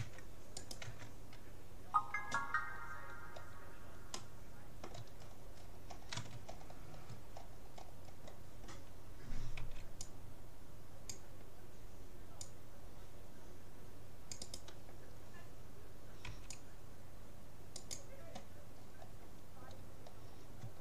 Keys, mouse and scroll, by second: 0.0 Tab, 0.7-2.3 right drag, 0.9 Tab, 4.1-5.5 middle drag, 7.8-9.9 middle drag, 9.7 c, 16.3 c, 18.7-20.1 middle drag.